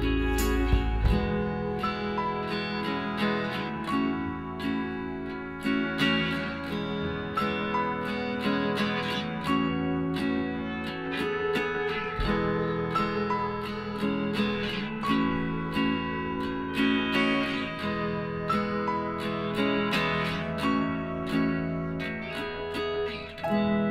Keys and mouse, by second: 1.6 f, 2.0 click, 5.1 f, 5.8 Tab, 9.1 Tab, 9.9 a, 12.6 KP_Divide, 13.6 a, 14.6 Tab, 14.9-16.7 right drag, 15.2 Tab, 16.0 KP_1, 16.9 middle click, 17.1 z, 21.0 b, 23.6 z.